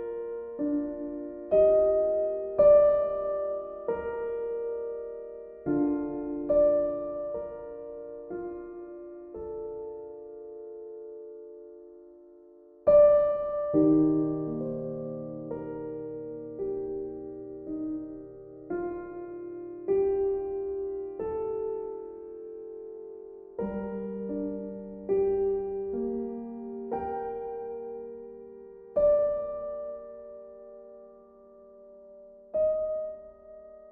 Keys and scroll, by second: 7.1 ctrl+d, 8.7 v.